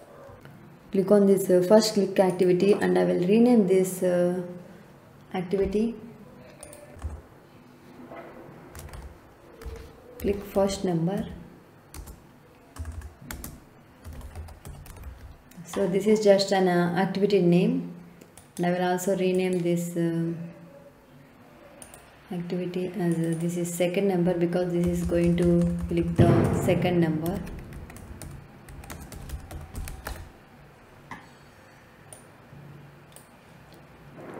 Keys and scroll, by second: 6.9 BackSpace, 8.4-15.4 typing, 24.8 BackSpace, 27.0-30.5 typing.